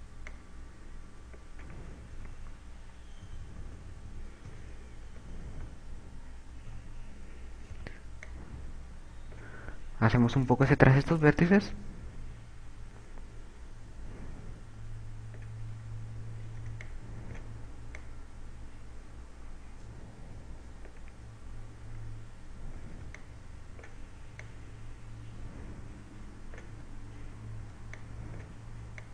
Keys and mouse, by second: 1.2 click, 3.1 KP_8, 4.2-6.6 typing, 7.7 a, 8.7 b, 11.7 click, 16.8 a, 17.3 b, 18.1 click, 22.3 a, 23.0 b, 25.5 click, 27.3 a, 28.7 b.